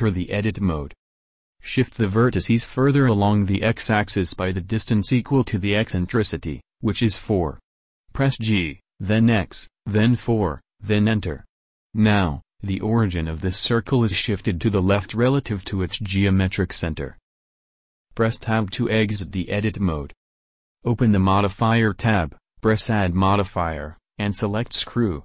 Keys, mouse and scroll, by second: 8.9 g, 18.6 Tab, 19.9-21.3 drag, 22.5-23.8 middle drag, 23.8-25.2 drag.